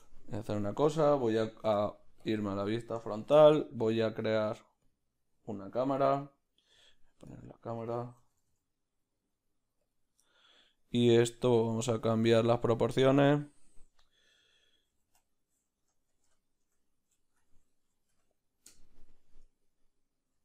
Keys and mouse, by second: 2.3 q, 4.9 shift+a, 8.2 g.